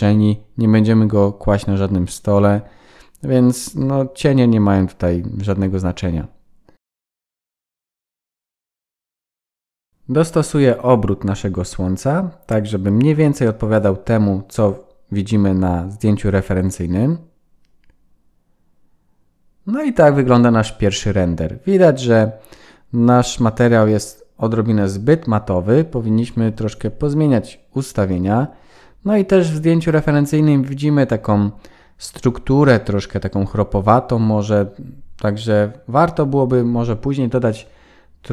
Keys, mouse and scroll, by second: 1.8 g, 3.3-4.7 scroll up 6, 4.7 middle click, 4.7 scroll up 3, 8.0 r, 10.2 r, 12.1 KP_0, 13.9 click, 14.2 click, 22.6 shift+middle click, 32.7 click, 34.4 click.